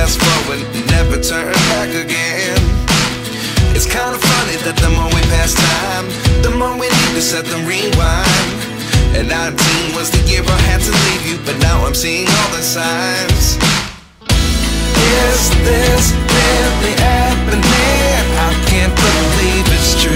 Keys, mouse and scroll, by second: 2.9 alt+click, 14.1 right click, 15.6 double click.